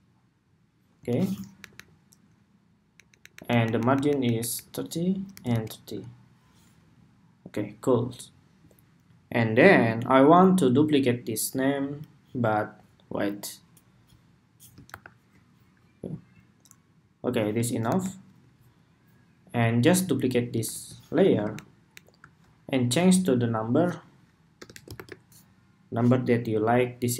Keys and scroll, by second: 1.3 alt+Up, 1.5 alt+Up, 3.3 alt+Up, 3.5 alt+Up, 3.6 alt+Up, 3.8 alt+Up, 3.9 alt+Up, 4.1 alt+Up, 4.3 alt+Up, 5.0 alt+Right, 5.2 alt+Right, 14.7 super+-, 17.5 super+=, 20.4 super+d, 26.3 ⟲.